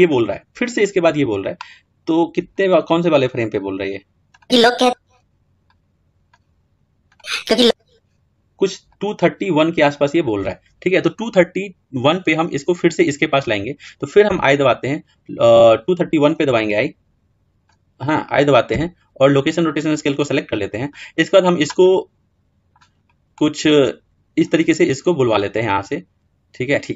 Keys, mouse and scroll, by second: 16.4-18.5 drag, 18.5 i, 21.6-22.7 middle drag, 22.7-23.1 scroll down 2, 23.1-24.3 middle drag, 24.3-25.4 scroll up 2, 25.4-26.9 middle drag.